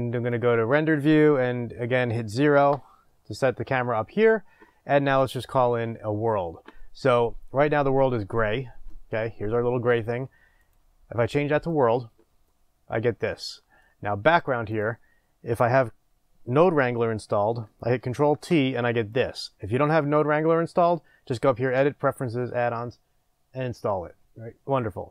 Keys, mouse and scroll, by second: 2.6 KP_0, 11.8-18.3 drag, 18.3 ctrl+t, 19.1 click.